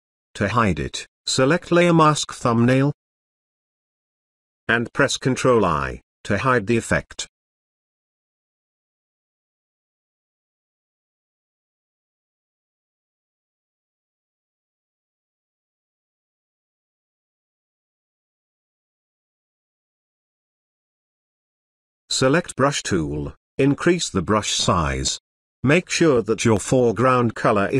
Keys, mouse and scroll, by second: 6.7 click, 7.9 ctrl+i, 10.4 space, 10.8-13.2 ctrl+drag, 14.6 space, 14.9-15.5 ctrl+drag, 21.9 b, 23.3-25.3 typing, 25.9-27.7 drag.